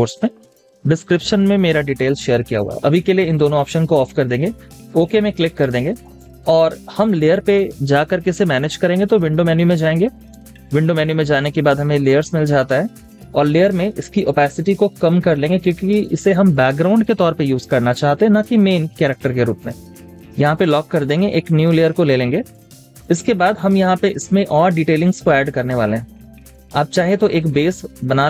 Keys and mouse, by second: 5.6 space, 23.4 typing, 26.1 double click, 26.4 space, 27.7 space.